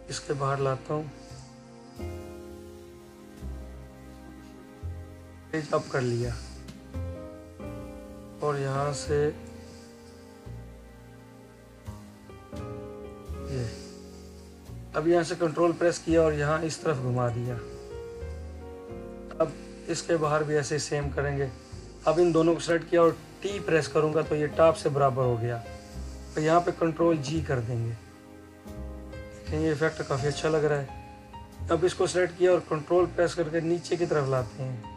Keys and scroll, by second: 2.1 ctrl+z, 2.8 ctrl+z, 3.5 ctrl+z, 27.0 ctrl+g.